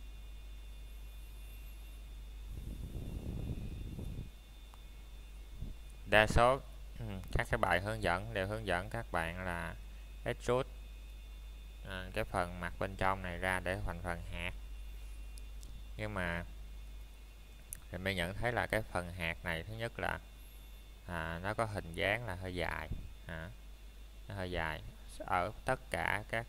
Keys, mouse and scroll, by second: 3.3-3.8 scroll down 1, 3.8 middle click, 4.2-5.6 scroll up 1, 5.6 Tab, 6.9 click, 13.4 click, 26.0 click.